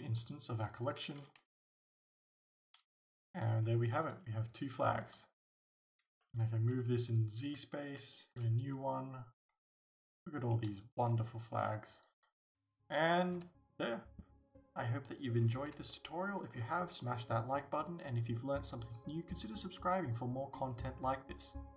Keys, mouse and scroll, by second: 1.4 g, 2.3 click, 2.5 alt+a, 4.1 right click, 4.6 right click, 6.0 click, 6.2 middle click, 6.4 middle click, 9.5 click, 10.1 g, 10.9 click, 12.1 typing, 15.4 scroll up 1, 16.5-19.4 middle drag.